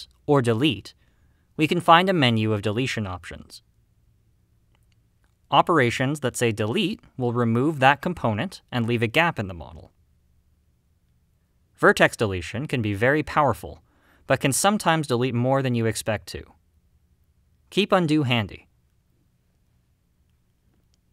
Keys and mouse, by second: 9.4 click, 10.9 x, 13.7-16.3 middle drag, 18.1 x.